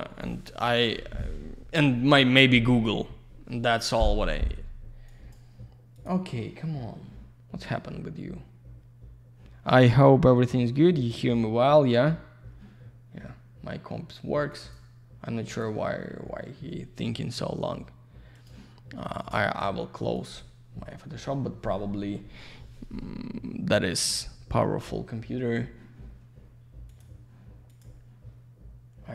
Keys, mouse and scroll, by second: 5.1 click, 5.9 click, 6.0 click, 14.5 click, 15.5 click, 15.6 click, 18.7 click, 19.2 click, 19.3 click, 20.1 click, 20.3 click, 26.9 click, 27.0 click, 27.7 click, 27.8 click.